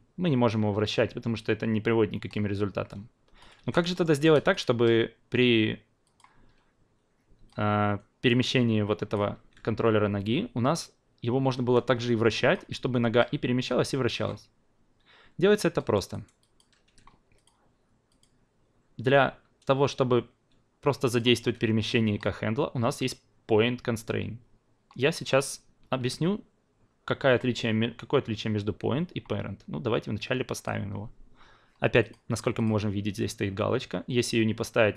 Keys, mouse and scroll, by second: 3.6 ctrl+z, 3.9 alt+middle drag, 4.1 alt+right drag, 4.3 alt+click, 6.0 click, 7.4-9.4 drag, 12.0 click, 12.9 ctrl+z, 15.7 alt+middle drag, 16.1 alt+right drag, 16.4 alt+click, 16.8 q, 17.3 click, 18.1 click, 21.1 shift+click, 30.5 click, 32.0 click, 32.5 click.